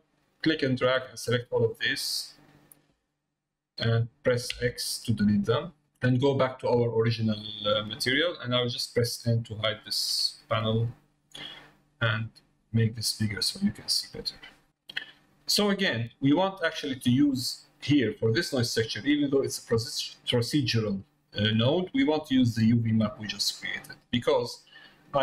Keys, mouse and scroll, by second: 0.1 middle click, 0.7-2.2 drag, 2.6 middle click, 5.5 middle click, 7.4 middle click, 12.3 click, 13.5 middle click, 15.8 middle click, 17.1 middle click, 18.6 middle click, 19.4 click, 20.2-21.6 drag, 22.9-24.1 drag.